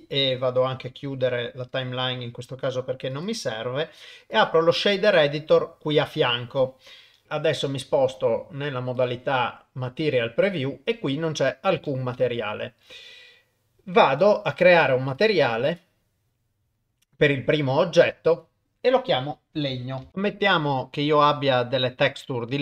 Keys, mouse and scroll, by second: 0.1-1.8 drag, 3.1-5.7 drag, 5.9 click, 7.7 middle click, 9.7 click, 10.2 scroll up 2, 10.7 scroll down 1, 11.1 middle click, 11.8 shift+middle click, 14.2 click, 15.1 click, 15.7-16.7 drag, 18.3-20.1 drag.